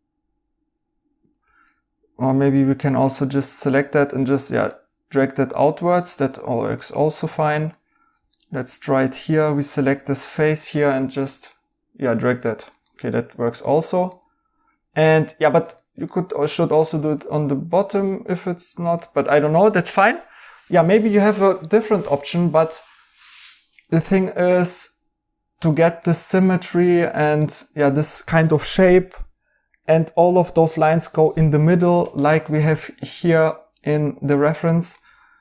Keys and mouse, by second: 1.2 Escape, 1.7 Escape, 4.6 right click, 6.7 right click, 12.4 right click, 21.1 right click, 26.1 right click, 31.0 right click, 34.4 right click.